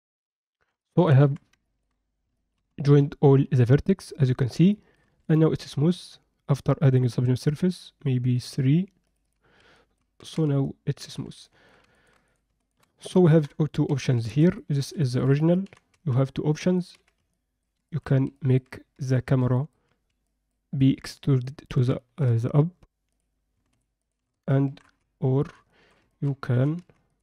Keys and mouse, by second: 0.8 middle click, 1.2 Tab, 1.7 ctrl+alt+middle click, 2.4 alt+shift+middle click, 2.8 ctrl+alt+middle click, 4.7 middle click, 5.1 Tab, 7.1 click, 8.3 click, 9.1 click, 9.7 middle click, 10.2 Tab, 10.6 middle click, 11.1 Tab, 11.4 middle drag, 11.9 ctrl+alt+middle click, 12.3 drag, 13.3 KP_1, 13.9 z, 14.3 alt+shift+middle drag, 14.5 ctrl+alt+middle click, 15.0 shift+middle click, 15.7 g, 17.1 z, 17.3 alt+middle drag, 17.9 ctrl+alt+middle drag, 18.3 alt+middle click, 19.1 ctrl+middle click, 19.5 middle drag, 20.3 alt+middle click, 20.8 middle drag, 21.4 middle click, 22.0 ctrl+alt+middle click, 23.1 click, 24.7 shift+d, 25.7 shift+middle drag, 26.1 ctrl+middle click, 26.5 g.